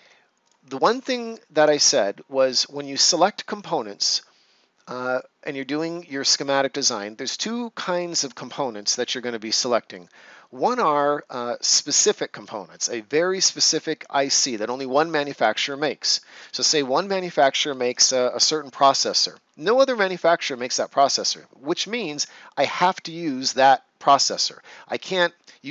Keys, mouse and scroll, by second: 0.3 click, 0.7-1.5 ctrl+scroll down 1.